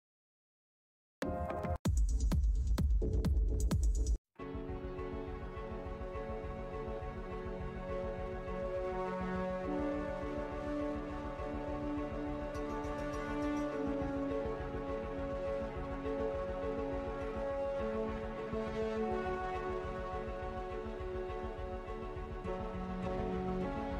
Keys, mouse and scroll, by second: 0.7 click, 3.9 click, 4.3-5.4 scroll down 1, 8.3 alt+Tab, 9.9 click, 10.8 scroll down 1, 11.7 ctrl+w, 14.0 scroll down 1, 15.0 ctrl+w, 17.6 scroll down 1, 18.7 scroll, 18.7 scroll up 1, 20.0 click, 20.6-23.4 typing, 23.4 Tab.